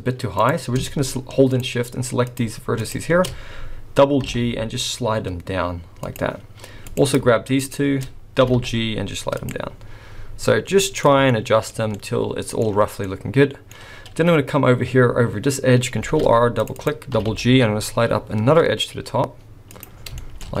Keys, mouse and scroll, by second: 0.4 click, 1.5 shift+click, 2.3 click, 2.7 shift+click, 4.2 g, 6.9 click, 7.6 shift+click, 8.4 g, 9.7 scroll down 3, 10.6 middle click, 11.3 shift+middle click, 12.0 middle click, 13.0 middle click, 14.8 scroll up 3, 16.0 ctrl+r, 17.2 g, 20.0-20.4 scroll down 4, 20.4 shift+middle click, 20.4-20.6 scroll up 3.